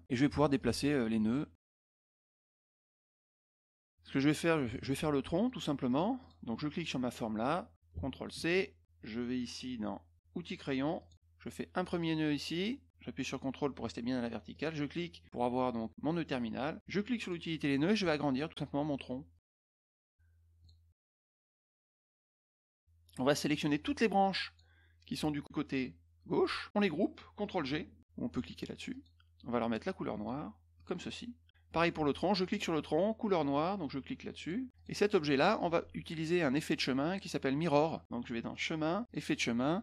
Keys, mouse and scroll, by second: 0.5 click, 1.3 click, 2.7 click, 3.6 middle click, 5.8 click, 6.2 click, 7.0 click, 8.3 ctrl+c, 10.9 click, 11.9 click, 14.5 ctrl+click, 17.2 click, 18.5 click, 19.3 middle click, 19.3-19.7 scroll up 3, 19.5 middle click, 19.6 middle click, 20.6 click, 21.4 click, 23.5-24.5 drag, 28.9 click, 30.7 click, 32.4 click, 34.3 click, 34.7 click, 38.5 click, 39.0 click.